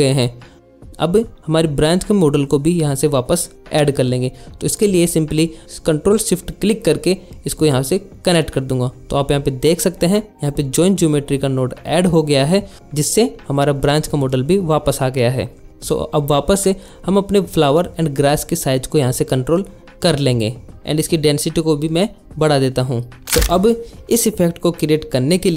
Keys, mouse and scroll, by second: 0.7 click, 0.8 click, 1.0 click, 1.1 click, 1.4 alt+shift+z, 1.4 alt+shift+z, 2.2 click, 3.3 click, 6.0 ctrl+shift+click, 9.5 middle click, 10.3 shift+middle click, 14.4 click, 15.1-17.4 shift+middle drag, 17.7 shift+middle click, 18.2 shift+middle click, 20.9 click.